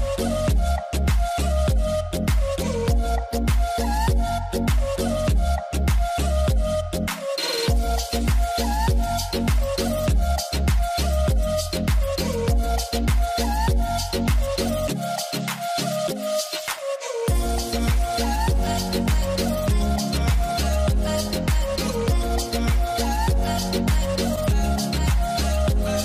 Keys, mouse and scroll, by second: 0.3 alt+w, 0.6-1.2 scroll down 1, 1.3 alt+middle click, 5.3 F10, 8.5 middle click, 8.8 m, 16.2 middle click, 16.4-16.9 scroll up 2, 16.6 F3, 21.8 double click.